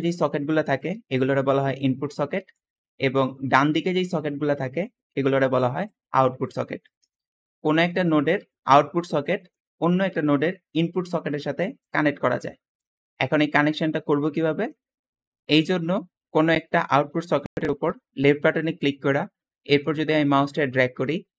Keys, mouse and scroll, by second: 2.3-4.4 scroll down 3, 2.7 Escape, 3.3 Escape, 6.5 middle click, 6.5 scroll down 2, 6.8 Escape, 12.9 Escape.